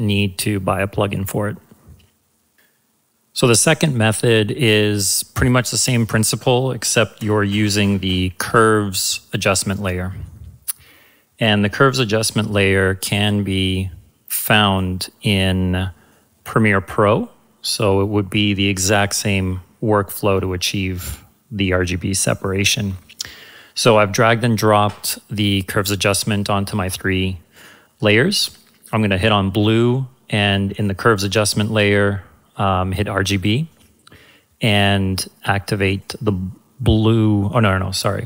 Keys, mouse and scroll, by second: 5.7 click, 6.9-8.9 typing, 10.2-12.1 drag, 16.4-17.9 drag, 28.4 click, 30.7 click, 33.7 click, 35.9 click.